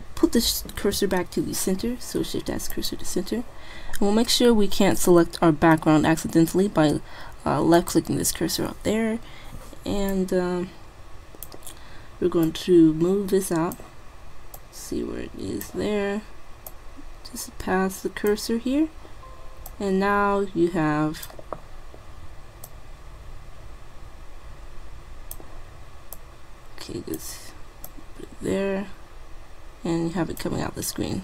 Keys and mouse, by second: 0.5 shift+s, 6.5 middle click, 7.8-9.6 drag, 10.2-11.9 drag, 12.5-14.3 drag, 14.3 middle click, 14.7-16.4 drag, 16.8-18.6 drag, 19.8-21.5 drag, 21.6-22.7 middle drag, 22.7 click, 24.0 click, 26.2-27.4 drag, 28.6 click, 29.8-31.2 middle drag.